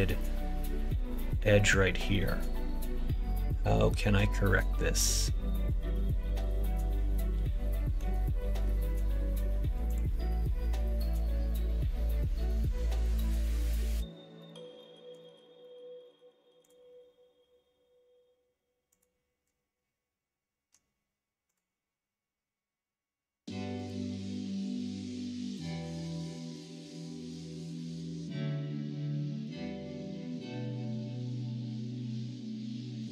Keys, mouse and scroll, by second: 0.1 middle click, 6.5-7.9 middle drag, 9.8 click, 18.9 click, 21.4 click, 23.7 click, 24.2 middle click, 24.7 click, 25.1 middle click, 25.8 middle click, 27.1-28.2 middle drag, 28.7 middle click, 32.9 middle click.